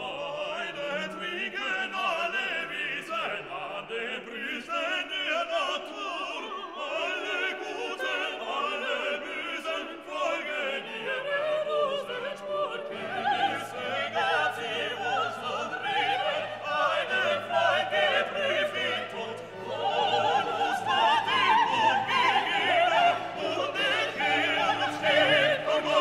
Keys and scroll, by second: 1.2 ctrl+g, 2.2 ctrl+alt+shift+e.